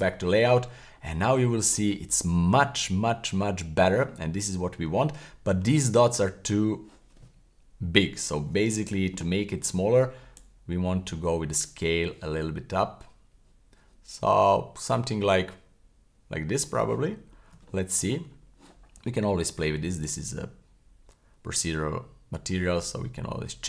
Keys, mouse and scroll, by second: 0.9-1.3 scroll up 2, 1.3-1.7 middle drag, 2.1-2.4 scroll down 1, 2.4-4.0 middle drag, 4.3-5.1 scroll up 1, 5.3-5.7 middle drag, 5.3 scroll up 1, 9.6-10.3 scroll up 1, 10.3-16.7 drag, 17.1-17.5 scroll up 3, 17.7 shift+middle click, 18.4 scroll down 1, 20.0-23.6 drag.